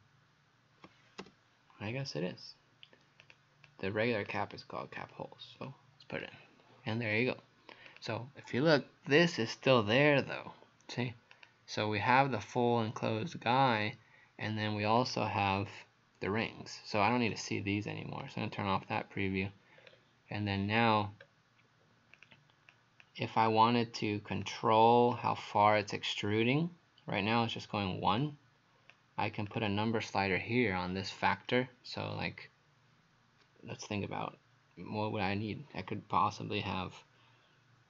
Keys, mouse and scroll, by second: 1.2 p, 3.2 click, 3.7 click, 5.0 click, 6.2 click, 11.4 click, 15.0 click, 17.3 right click, 18.2 click, 18.9 click, 19.8-21.2 scroll down 2, 21.2 middle click, 22.2 click, 22.7 click, 23.5 click, 29.6 click.